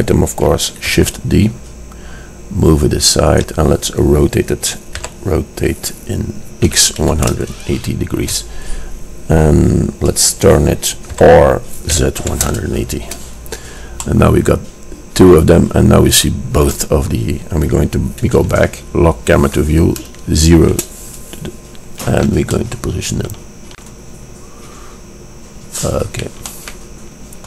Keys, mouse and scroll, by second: 1.1 shift+d, 5.1 r, 11.2 r, 14.9-15.4 middle drag, 15.9-20.8 middle drag, 20.8 KP_0, 24.2 click, 24.4 click, 25.4-27.4 middle drag.